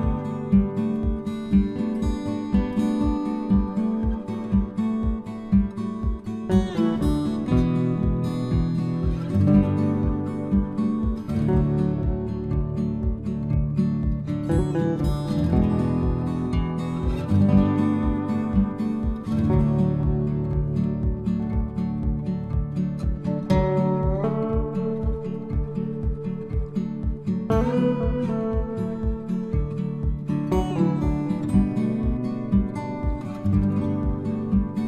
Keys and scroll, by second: 19.2 alt+Tab, 28.3 ctrl+v.